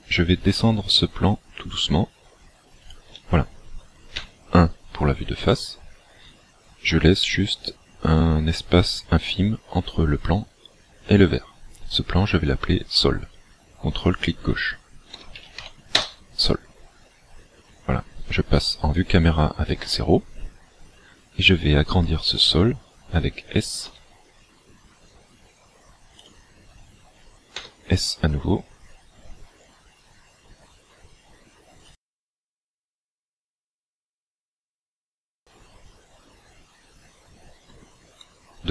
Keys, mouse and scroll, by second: 2.9 shift+click, 4.2 KP_1, 5.3-5.7 scroll up 1, 6.1-7.0 scroll up 3, 14.1 ctrl+click, 17.6-18.8 scroll down 1, 18.8 scroll down 1, 20.0 KP_0, 23.9 s, 26.2 click, 27.6 s, 32.0 click.